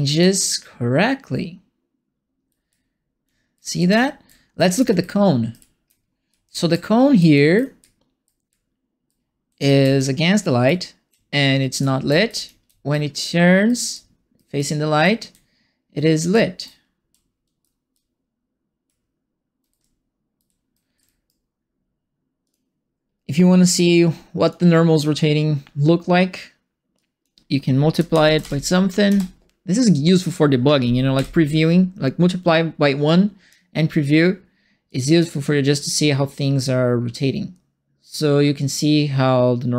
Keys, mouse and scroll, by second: 0.1 d, 2.6-20.9 typing, 22.4 click, 23.7 click, 26.9 click, 27.6-28.8 typing, 29.0 Return, 31.1 p, 33.0 click, 34.8-39.7 drag.